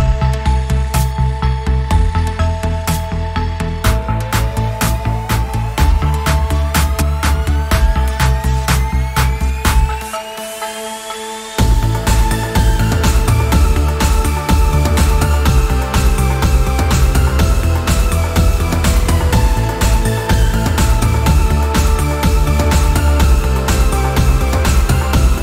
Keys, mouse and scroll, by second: 0.8 click, 1.3 alt+click, 4.1 click, 8.1 scroll up 1, 8.5 click, 11.3 click, 12.1 click, 14.0 click, 17.1 shift+m, 18.4 alt+click, 19.6 click, 20.2 scroll up 1, 20.3 click, 21.0 click, 21.9-25.4 drag.